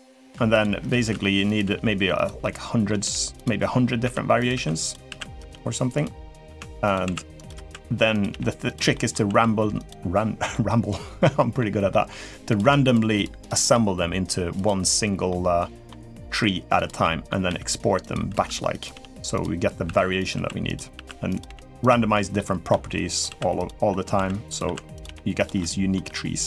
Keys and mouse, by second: 0.0-1.4 typing, 2.2 middle click, 2.8 g, 3.8 e, 4.8-9.0 typing, 8.7 middle click, 10.3-11.3 middle drag, 11.7 middle click, 12.3 click, 12.9 shift+click, 13.2 shift+click, 14.3 click, 15.0 middle click, 16.0 r, 16.8 middle click, 17.2-21.2 typing, 21.9 middle click, 22.5-26.2 typing, 25.3 middle click.